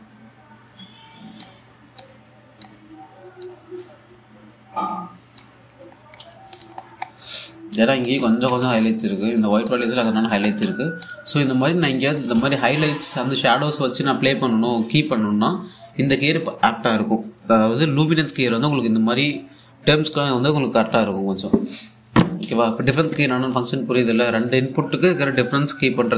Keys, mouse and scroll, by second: 6.4-6.8 scroll up 1, 7.2 click, 7.4-7.7 scroll down 1, 8.7 click, 8.9 typing, 9.4-9.9 scroll up 1, 10.3 click, 10.8-11.1 scroll down 1, 11.1 a, 11.7 alt+click, 13.0 1, 13.5 scroll up 1.